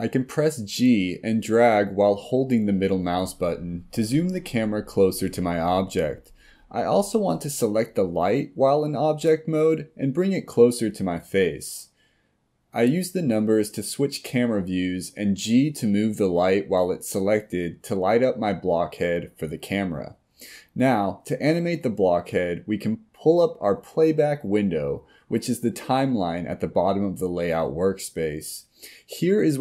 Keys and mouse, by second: 8.0 click, 10.1-10.9 middle drag, 11.4 KP_1, 12.6 KP_3, 13.3 g, 15.9 g, 22.3-24.1 drag.